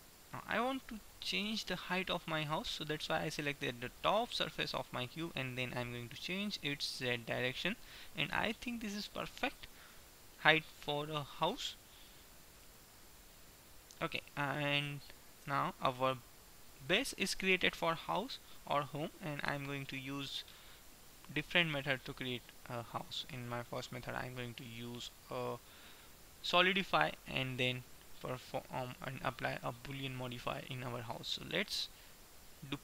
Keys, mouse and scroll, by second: 6.3-8.1 drag, 10.1-12.0 middle drag, 12.0 KP_1, 12.6-14.5 middle drag, 15.5 Tab, 19.6-26.3 middle drag.